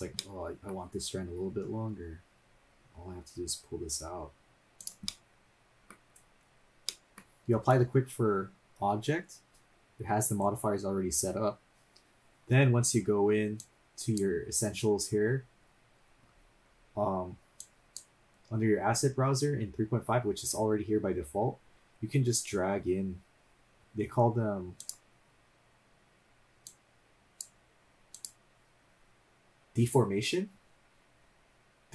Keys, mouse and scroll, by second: 0.0 middle click, 0.3-2.4 middle drag, 2.4 g, 5.0-6.2 middle drag, 6.2-6.9 scroll down 1, 6.9 middle click, 13.6 click, 15.3-17.6 scroll up 7, 17.6 click, 24.8 click, 26.6 click, 28.1 click, 29.7 click.